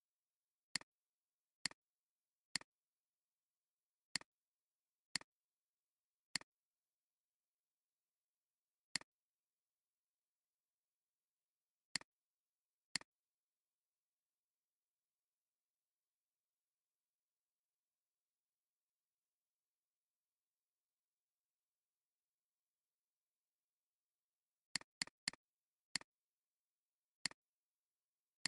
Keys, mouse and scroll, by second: 3.6 alt+scroll down 1, 4.0-6.8 typing, 4.8 alt+scroll down 1, 6.0 alt+scroll down 1, 7.2-7.5 alt+scroll up 2, 8.7 alt+scroll down 1, 9.4 space, 9.9 alt+scroll up 1, 13.1 shift+click, 24.8 double click.